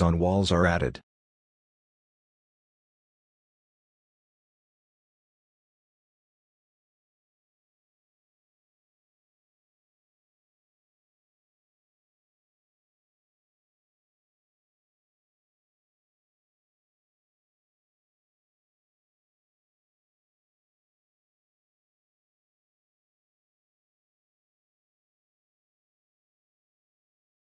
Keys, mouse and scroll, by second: 0.4-2.0 scroll down 1, 2.5 middle click, 3.0 scroll down 1, 4.8 middle click, 7.6 scroll down 1, 8.0 middle click, 8.4-10.1 scroll down 1, 10.3-11.0 scroll up 1, 13.8 middle click, 14.8 right click, 22.5 middle click, 23.2 right click, 24.7 middle click.